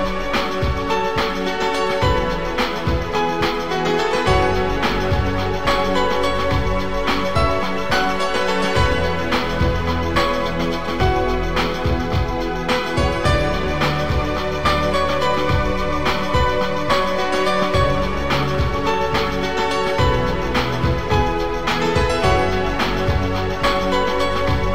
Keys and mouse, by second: 0.8 click, 1.3 shift+click, 2.0 click, 3.0 click, 4.1 shift+click, 4.3 click, 5.4 click, 7.2 Delete, 9.8 Delete, 9.8 click, 12.5 click, 14.5 click, 16.0 click, 18.2 click, 18.8 click, 19.8 click.